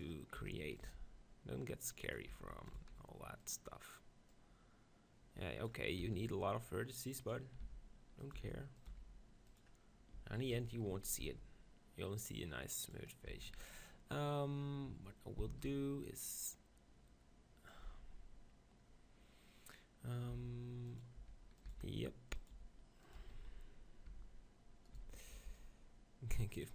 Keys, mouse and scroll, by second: 0.4 e, 0.9 s, 2.7 e, 2.9 s, 2.9-6.3 drag, 6.1 e, 7.6 e, 8.3 s, 8.8-10.1 drag, 8.9 e, 10.1 Tab, 10.5 Tab, 11.2 z, 11.3 Tab, 12.8-14.7 drag, 13.3 Tab, 13.5 z, 15.5 shift+d, 15.7-17.7 right drag, 16.4-18.2 drag, 20.3-23.3 typing, 22.5-26.7 drag, 23.2 Tab, 24.1 Tab, 24.9 right click, 25.0 z, 25.3 b.